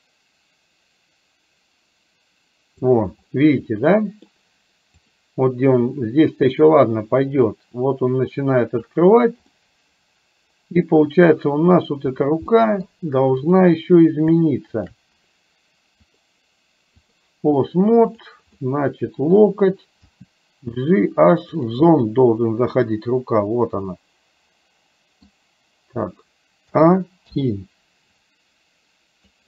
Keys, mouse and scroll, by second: 3.9 middle click, 5.1 click, 7.5-8.9 drag, 9.7-11.2 middle drag, 12.6 middle click, 14.9 shift+click, 16.1-17.2 drag, 18.6 middle click, 20.1 g, 22.0-23.0 scroll up 1, 23.0-25.4 middle drag, 26.7 a, 27.4 i, 28.2-29.4 drag.